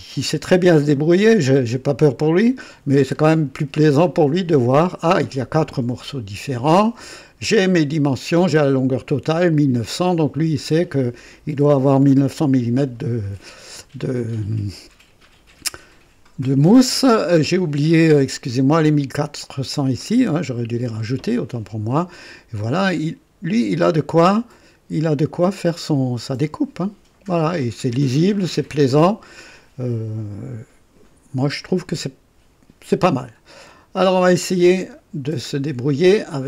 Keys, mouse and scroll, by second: 34.0 click.